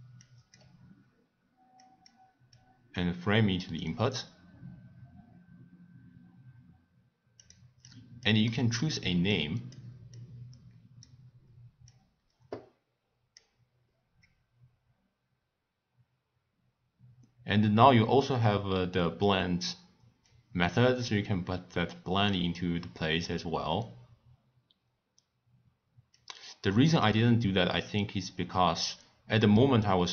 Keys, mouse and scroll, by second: 0.2 click, 1.8 click, 2.5-7.0 drag, 7.4 click, 7.8 click, 8.5-9.3 middle drag, 9.3 click, 10.1 click, 11.9 drag, 20.2 click, 26.1 click.